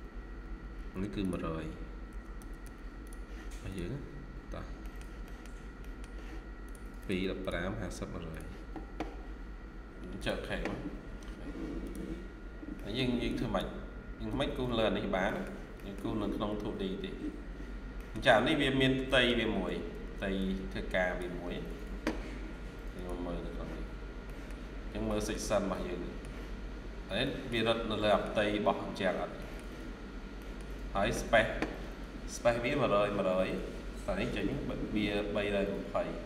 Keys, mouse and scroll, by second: 0.0-0.5 typing, 2.0-2.5 typing, 3.8 scroll down 1, 4.7 middle click, 6.9 double click, 12.0-12.6 scroll down 1, 12.6 middle click, 12.8-13.2 scroll down 1, 14.2-15.0 typing, 14.5 scroll down 1, 15.2 middle click, 16.3-16.6 scroll up 1, 17.6 scroll down 1, 17.9 middle click, 18.3 scroll up 1, 19.0 middle click, 19.9 ctrl+q, 20.8 ctrl+q, 21.3 Escape, 23.8-24.1 scroll down 1, 24.1 middle click, 24.6-25.0 scroll down 1, 25.0 middle click, 26.5-27.0 scroll up 1, 27.1 middle click, 27.7 scroll down 1, 28.0 middle click, 29.3 middle click, 29.4-29.8 scroll down 1, 29.8-30.3 scroll up 1, 30.3 middle click, 30.6-31.8 scroll down 1, 33.5-34.5 scroll up 1.